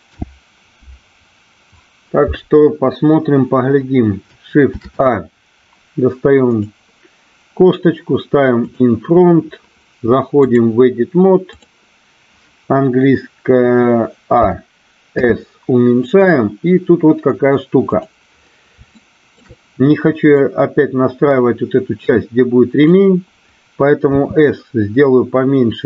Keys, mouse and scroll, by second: 0.0 n, 4.6 shift+a, 8.6 click, 10.6-11.8 drag, 14.4 a, 15.1 s, 17.9 click, 18.9 shift+middle click, 20.4-22.9 drag, 24.1 s.